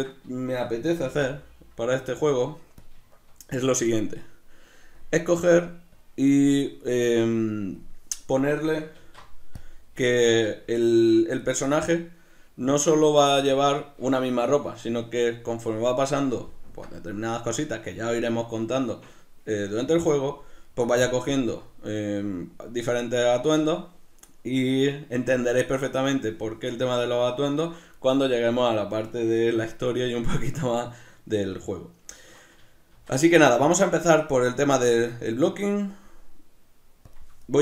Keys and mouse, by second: 0.9 g, 2.9 click, 3.1-5.0 shift+middle drag, 5.0-7.9 drag, 8.4-10.3 middle drag, 9.0 alt+q, 27.1 ctrl+middle click, 31.5 ctrl+middle click, 32.9 shift+a.